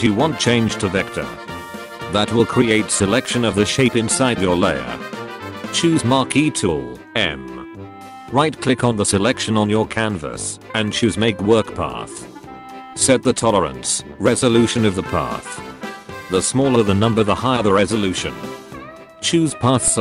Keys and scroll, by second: 6.1 m, 19.5 a.